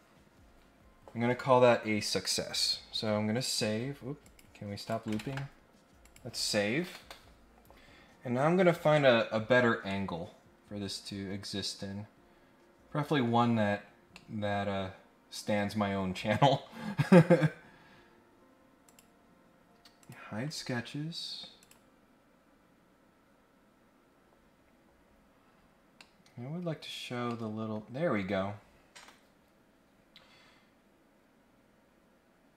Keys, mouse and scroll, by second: 4.2 click, 4.8 click, 6.0 click, 9.9-11.8 middle drag, 12.9 scroll up 1, 13.1-14.1 scroll down 1, 14.1 middle click, 18.8 click, 20.0 click, 20.5 click, 21.6 click, 25.9 middle click, 27.2 middle click.